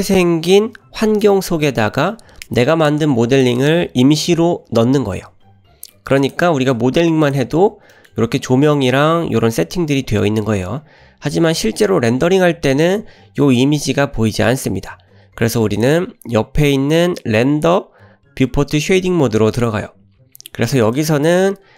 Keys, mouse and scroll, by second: 2.8-3.5 drag, 3.6 click, 6.2 click, 6.7 drag, 7.3 click, 7.6-8.0 scroll up 2, 7.9 middle click, 12.7-15.9 drag, 19.7 click, 20.3-20.7 scroll down 2, 20.7 click, 20.9-21.3 drag.